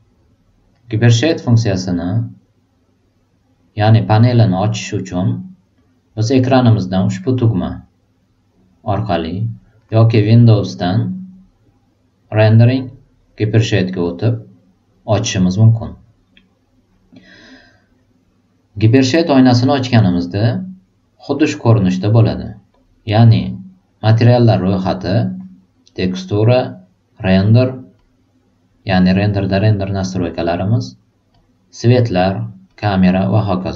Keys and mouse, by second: 0.7 click, 1.2 click, 10.7 click, 14.0 click, 23.3-24.1 drag, 25.9 click, 31.3 click, 32.6 click.